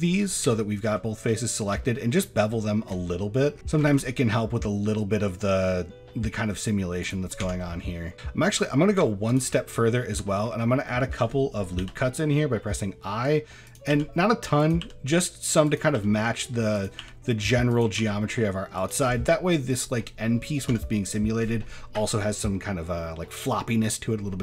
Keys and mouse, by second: 0.5 shift+middle drag, 1.8 shift+middle click, 2.6 shift+middle drag, 3.9 ctrl+b, 7.4 Tab, 7.6-8.0 middle drag, 9.3 shift+click, 10.2 shift+middle click, 10.9 shift+middle drag, 11.8 i, 13.9 i, 14.8 i, 15.9 i, 17.0 i, 17.7 click, 18.0 i, 19.3 middle drag, 20.7 Tab.